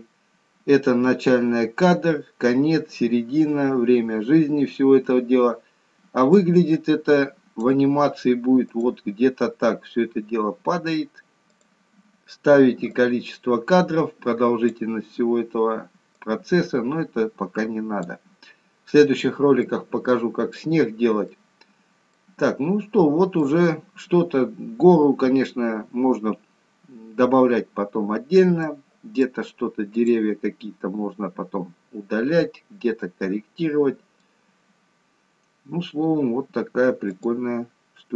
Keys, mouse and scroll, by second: 4.1-6.3 scroll down 2, 6.3 click, 16.7 click, 19.1-19.7 scroll up 1, 19.7 middle click, 20.9-21.5 scroll down 3, 21.5 middle click, 22.6-23.4 scroll up 1, 23.4 middle click, 23.4 scroll up 2, 25.0-25.5 scroll down 2, 25.5-26.2 scroll up 1, 28.8 middle click, 30.1 click, 31.1-31.7 scroll up 1, 33.1 middle click, 35.0-36.1 scroll down 1, 36.1-36.8 scroll down 2, 36.8-37.3 scroll down 1, 37.3 click, 37.9-38.1 scroll down 1.